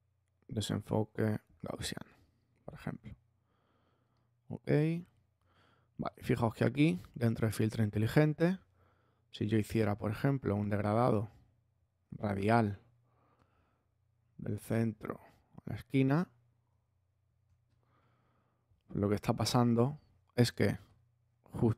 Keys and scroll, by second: 14.4 Left, 17.4 space.